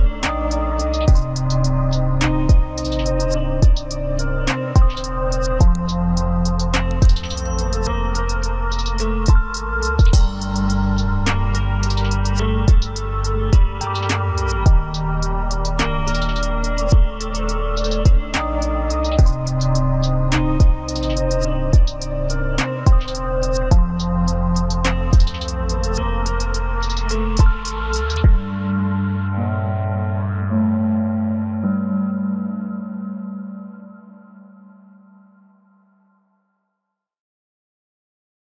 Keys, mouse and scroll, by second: 0.4 double click, 1.4-4.3 scroll down 1, 4.7 double click, 8.4 scroll up 1, 11.0-11.5 scroll up 1, 20.6 scroll down 1, 22.6 z, 23.9 ctrl+space, 24.8 typing, 26.6 ctrl+space, 26.9 ctrl+scroll down 1, 28.3 z, 31.5 typing, 31.8 ctrl+space, 35.1 right click.